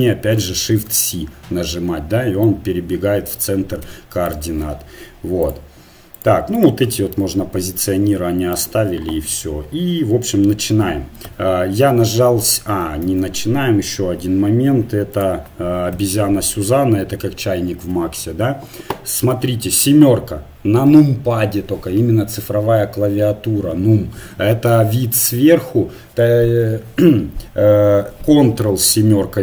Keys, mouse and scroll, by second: 0.7 shift+c, 3.8 x, 5.4-8.8 drag, 7.4-8.8 middle drag, 11.3 KP_7, 13.1 shift+a, 15.9 KP_1, 16.8-19.1 middle drag, 19.5 KP_7, 29.0 ctrl+KP_7.